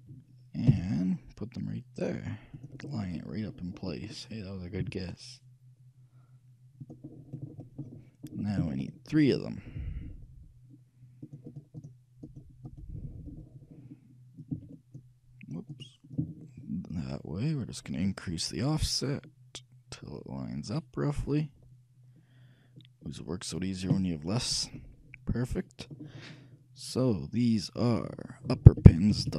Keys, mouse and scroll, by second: 0.8 g, 3.0-6.3 middle drag, 5.0 g, 7.3-11.4 middle drag, 11.4-18.0 shift+drag, 25.0-26.5 middle drag.